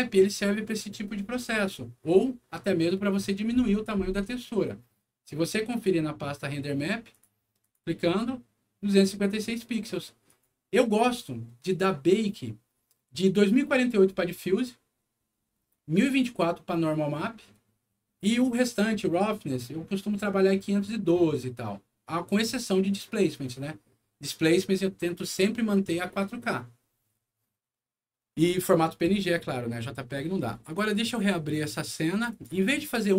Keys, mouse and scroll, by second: 0.4 scroll down 1, 5.6 click, 7.1 click, 7.6 click, 10.2 click, 27.7 middle click, 28.4 scroll down 1, 29.3 middle click, 30.9 click, 32.2 click.